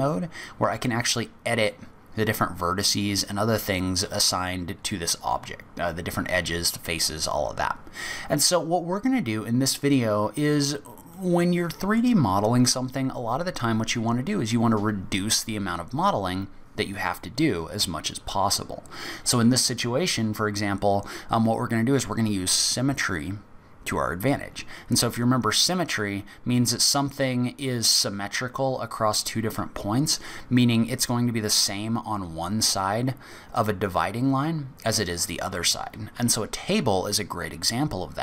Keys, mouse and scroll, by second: 8.9 middle click, 11.1 middle click.